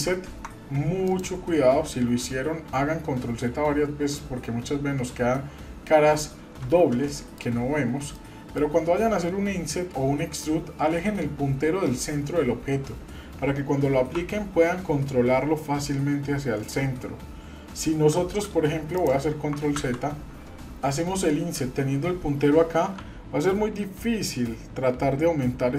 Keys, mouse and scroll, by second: 1.1 click, 7.1 shift+middle click, 8.1 shift+middle click.